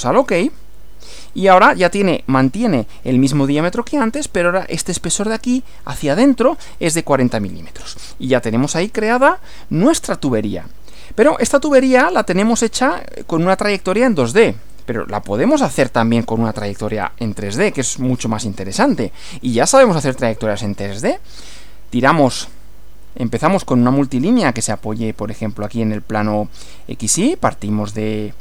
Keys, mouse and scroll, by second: 0.4 click, 1.1-1.6 scroll up 2, 6.6-7.1 scroll down 2, 7.5 scroll down 2, 9.0 click, 12.4 click, 14.8 click, 15.8 click, 17.0 shift+scroll down 2, 18.0-19.6 shift+middle drag, 21.5 click, 24.7 click.